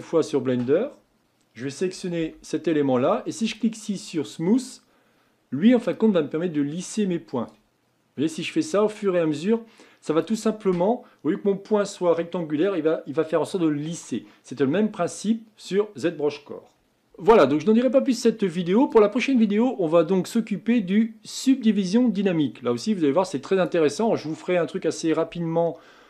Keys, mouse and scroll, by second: 1.3 click, 2.2 a, 3.5-6.0 drag, 7.7-10.0 drag.